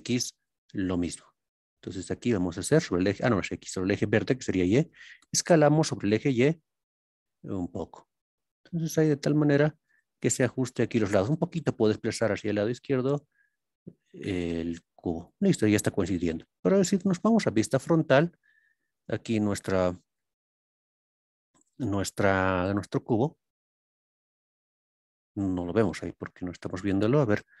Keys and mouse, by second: 0.0-1.0 shift+middle drag, 1.0 shift+click, 5.7 y, 9.8 click, 11.5 y, 15.2 click, 17.2 KP_1, 18.8 KP_3, 20.1 ctrl+KP_1.